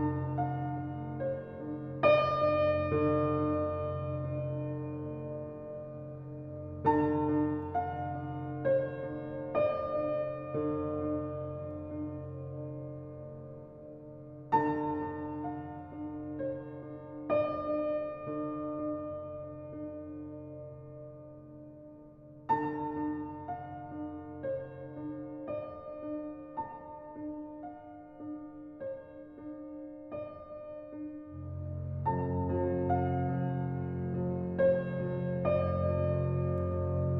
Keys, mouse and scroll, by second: 0.8 scroll down 1, 1.0 scroll up 1, 1.1-1.8 scroll down 17, 2.1 click, 2.5-4.4 scroll down 2, 4.5 click, 5.2-5.9 scroll up 6, 5.9-7.7 drag, 8.3 Tab, 8.7-9.1 scroll down 2, 9.1 middle click, 9.8 scroll up 4, 10.6-12.5 drag, 12.6-14.0 drag, 14.0 scroll up 2, 14.5-15.8 shift+middle drag, 15.8-17.5 drag, 17.5-17.9 scroll down 9, 18.3-20.3 drag, 22.0-24.0 drag, 26.8-30.6 drag, 33.4-35.9 drag, 36.5-37.1 drag.